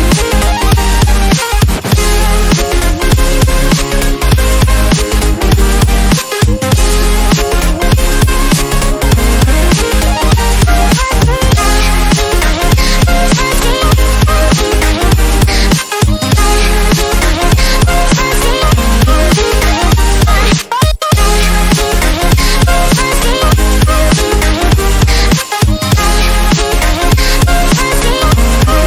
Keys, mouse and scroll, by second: 1.4 ctrl+d, 2.6 ctrl+z, 3.9 ctrl+z, 4.6 Delete, 5.3 Delete, 5.4 click, 6.0-7.3 ctrl+alt+drag, 7.6 ctrl+d, 8.2-8.6 scroll up 1, 8.6-9.2 drag, 12.4-12.8 click, 14.8 click, 14.9 click, 15.1-15.5 scroll down 1, 15.5-16.2 scroll up 1, 16.2 click, 17.8-21.3 drag, 21.7-22.4 scroll up 1, 22.6-23.2 click, 23.5 right click, 25.0 click, 25.2-26.2 scroll down 1, 27.3 scroll down 1, 27.6 shift+click, 28.1-28.7 scroll up 1, 28.7 click.